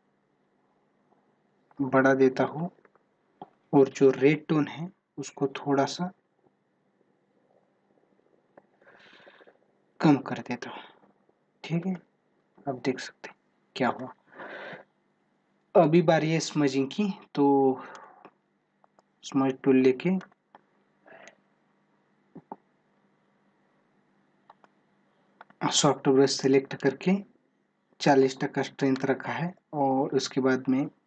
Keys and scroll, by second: 23.1 ctrl+-, 28.3 space, 29.7 ctrl+-.